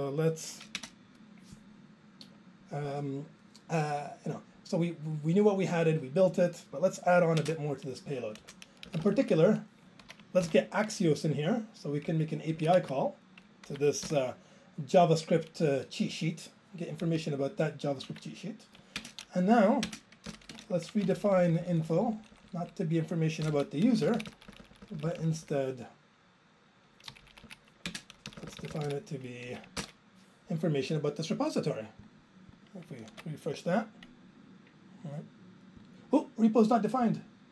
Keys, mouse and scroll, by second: 1.8 alt+space, 2.2-3.0 scroll, 3.0 click, 6.3 click, 7.4 alt+space, 8.5 Return, 8.9 Down, 9.0 Down, 9.1 Left, 10.8 ctrl+j, 12.1 Down, 12.6 Right, 12.7 Down, 12.8 Left, 14.4 ctrl+j, 17.1 Down, 18.1 ctrl+a, 19.1 ctrl+space, 19.9 ctrl+space, 20.0-20.9 typing, 20.9 ctrl+a, 21.1-21.8 Up, 21.9 Up, 22.0 Up, 22.2 Up, 23.5 ctrl+k, 23.6 ctrl+k, 24.1 Down, 24.2 Down, 24.3-24.7 Down, 24.9 Down, 25.0 Down, 26.7 Down, 27.1 Right, 27.3 Right, 27.5 Right, 27.9 ctrl+space, 28.3 Down, 28.4 Down, 28.5 Down, 28.6 Down, 28.7 Down, 28.8 Down, 30.4 ctrl+j, 31.4 click, 32.1 click.